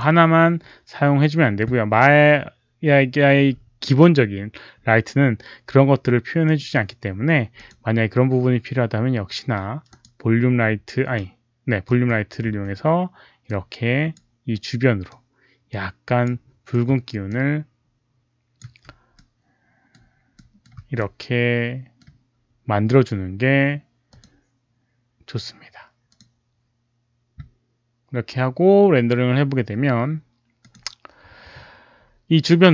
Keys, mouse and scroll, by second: 6.4 click, 7.5 click, 9.8 click, 11.8 click, 11.8 r, 12.4 w, 13.4 click, 15.0-16.2 drag, 16.5-17.4 typing, 17.2-18.5 drag, 18.5 5, 19.1-20.8 middle drag, 20.8 r, 21.0-24.0 middle drag, 24.0 click, 26.0 click, 30.5 click, 30.5 middle click, 30.5 r.